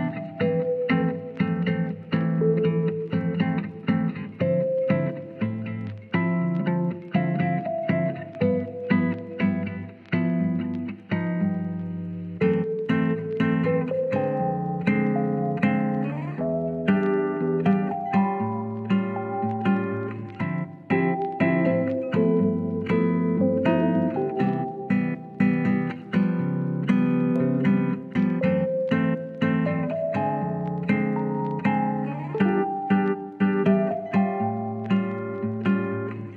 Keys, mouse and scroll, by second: 0.1 shift+middle click, 1.4 s, 4.3 click, 4.5 Tab, 4.9 middle drag, 5.1-5.5 scroll up 1, 5.5-6.0 middle drag, 8.2-9.0 middle drag, 9.5 shift+scroll up 1, 9.6 shift+middle click, 9.7 shift+scroll down 1, 9.9 scroll up 1, 10.0 middle click, 10.1-11.3 scroll down 1, 11.3 KP_1, 12.4 alt+z, 13.8-14.3 shift+middle drag, 14.3 Tab, 14.8 Tab, 15.3 alt+z, 16.8 shift+middle click, 17.9 shift+a, 21.8-22.4 drag, 25.3 s, 26.2 drag, 27.0 shift+middle drag, 28.5 Tab, 31.6 ctrl+z, 34.6 Tab, 35.7 Tab.